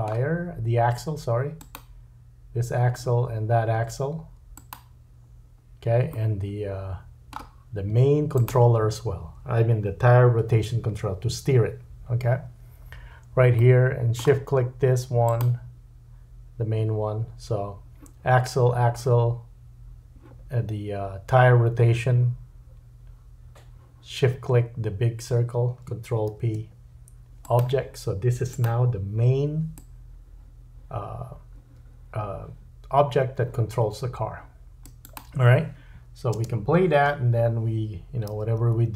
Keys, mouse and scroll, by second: 1.6 click, 4.5 shift+click, 6.1 middle click, 8.3 shift+click, 12.9-13.6 scroll down 3, 13.6 middle click, 15.2 shift+click, 26.3 ctrl+p, 28.5 click, 29.7-35.1 drag, 35.1-38.9 middle drag, 36.3 space, 38.3 g.